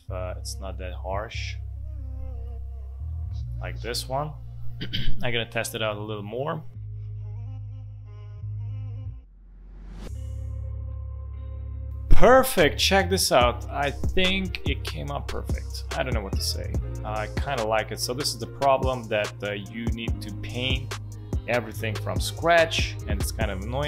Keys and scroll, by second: 8.6 space, 9.4 ctrl+z, 9.6 ctrl+z, 10.4 space, 10.9 space, 11.8 space, 13.9 space.